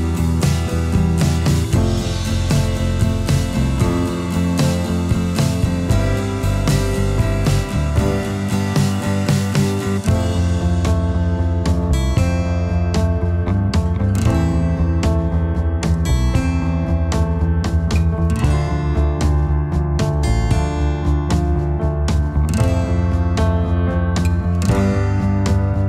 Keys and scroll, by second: 10.2 ctrl+0.